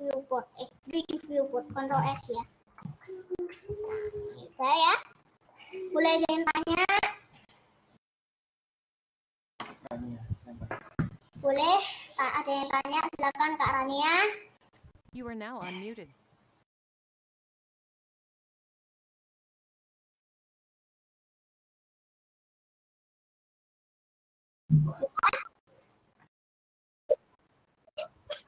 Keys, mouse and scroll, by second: 0.0 click, 0.0-0.5 scroll up 1, 2.9-8.6 middle drag.